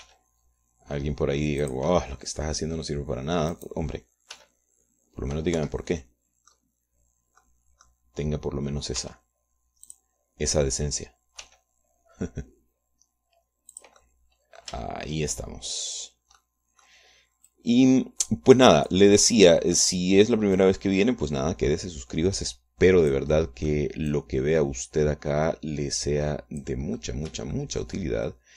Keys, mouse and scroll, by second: 0.3 right click, 0.7 right click, 1.4 g, 3.1 click, 4.3 click, 5.0 right click, 5.8 g, 7.0 Escape, 7.3 click, 8.9 click, 10.4 r, 11.3 click, 12.9 g, 15.2-16.2 drag, 16.3 shift+middle click, 17.9 click, 18.9-20.5 drag, 22.0-24.8 drag, 24.8 middle click, 25.5-28.3 drag, 28.4 middle click.